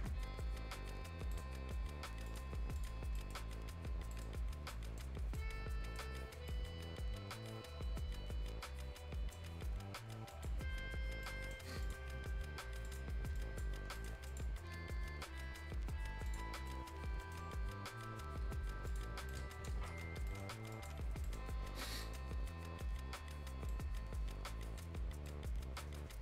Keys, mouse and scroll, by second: 2.3 click, 3.0 scroll down 1, 3.2 right click, 4.4 scroll up 1, 4.7 right click, 5.1 scroll down 1, 5.4 right click, 6.0 scroll down 1, 6.3 scroll up 1, 6.5-10.3 right drag, 10.3 click, 10.6-11.0 scroll down 1, 11.0 scroll up 1, 11.2 right click, 11.8 click, 14.0 right click, 14.3 click, 16.0 scroll up 1, 16.3 click, 16.5 scroll down 1, 16.7 right click, 16.7 right click, 17.9 scroll, 18.8 scroll up 1, 18.9 click, 19.1 scroll down 1, 19.3 right click, 19.9 Delete, 20.1 scroll up 1, 20.3 right click, 20.7 click, 21.1 Delete, 21.2 right click, 21.5-21.9 scroll up 1, 21.9 scroll down 1, 22.0 right click, 22.3-22.8 scroll up 1, 23.7-25.0 right drag, 25.0 scroll up 1, 25.3 right click, 26.0-26.2 scroll up 1.